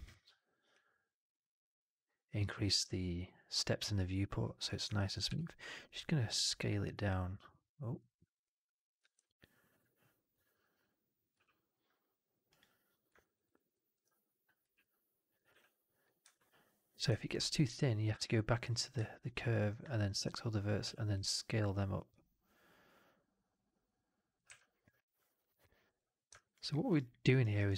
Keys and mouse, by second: 0.7-4.5 drag, 4.8 alt+click, 5.4-7.9 middle drag, 5.5 click, 8.9 w, 9.1-9.6 drag, 11.2 f, 13.1 alt+right click, 13.3 alt+right click, 13.6 alt+middle click, 15.2 middle drag, 15.4 w, 16.1 1, 18.1 alt+click, 20.0 ctrl+a, 20.7 r, 23.0-24.3 middle drag, 24.3 w, 26.2 right click, 26.4 click, 26.6 middle click, 26.8 right click, 27.0 click, 27.3 right click, 27.5 alt+right click.